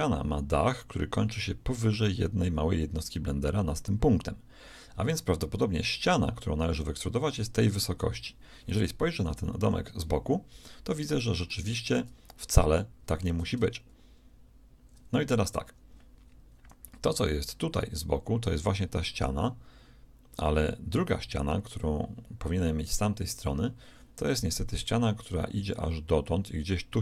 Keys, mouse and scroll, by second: 9.6 KP_3.